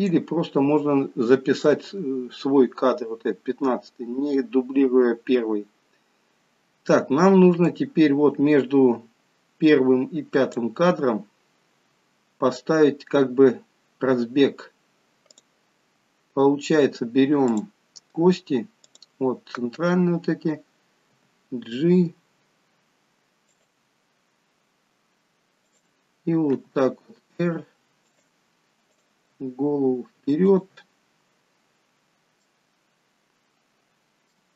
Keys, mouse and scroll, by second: 7.7 click, 12.7 scroll up 3, 13.2-13.8 scroll down 1, 13.8 scroll down 1, 15.3 click, 17.5 click, 18.8 click, 21.1 g, 24.2 scroll up 3, 24.7-25.4 scroll down 1, 25.4 scroll down 1, 25.7 click, 26.6 r, 28.9 click, 29.3 r, 32.4 middle click.